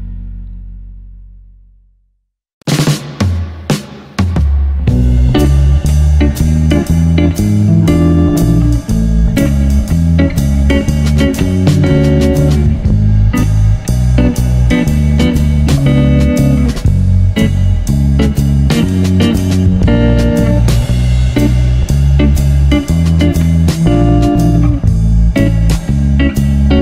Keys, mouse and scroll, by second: 0.3 click, 1.1-1.7 drag, 2.9 ctrl+t, 3.6 click, 3.9 click, 5.0 click, 5.6 click, 6.7 click, 8.0 click, 8.5 x, 9.2 click, 9.5 shift+a, 13.8 click, 14.6 shift+d, 15.9 click, 17.0 click, 17.7 click, 19.1 click, 19.4 shift+a, 22.8 click, 24.9 click, 25.9-26.3 scroll down 6, 26.3 shift+middle click.